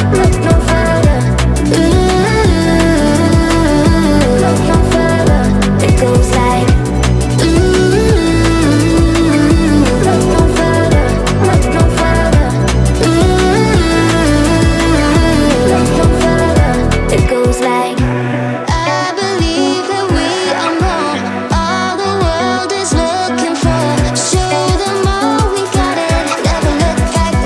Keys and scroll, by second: 7.8 space.